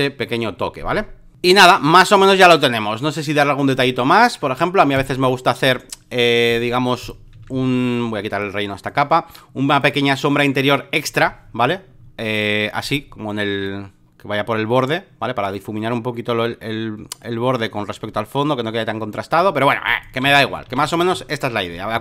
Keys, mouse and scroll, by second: 1.3 click, 2.2-4.8 drag, 5.0 ctrl+click, 6.5 click, 7.4 ctrl+d, 8.4-13.2 drag, 13.7-20.2 drag, 20.2 v.